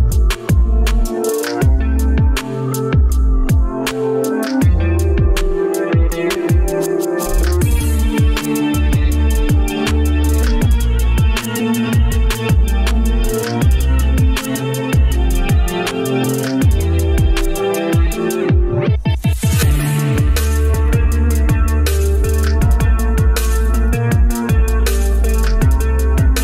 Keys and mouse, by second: 6.5-8.4 middle drag, 8.7 shift+middle click, 14.0-16.1 middle drag, 16.5-16.9 shift+middle drag, 17.1-19.1 middle drag, 21.6 shift+middle click.